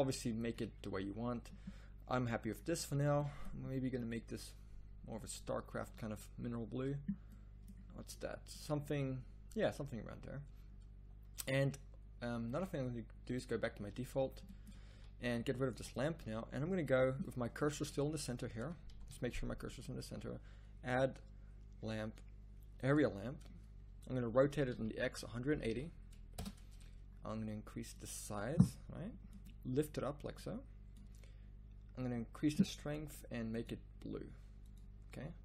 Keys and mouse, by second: 0.5-2.5 drag, 7.7-10.4 drag, 14.1 z, 14.2 z, 14.9 a, 15.8 x, 18.9 shift+s, 24.2 r, 27.9-29.9 drag, 30.3-34.9 drag.